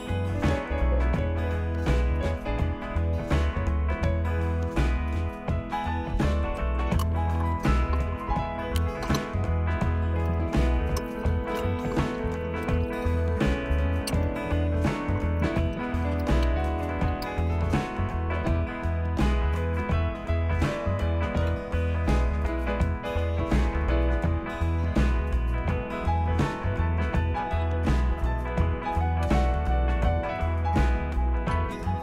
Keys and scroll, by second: 1.9 Return, 18.3 Tab, 19.2 Tab, 21.5 Return, 29.2 space, 30.3 Down, 31.5 space.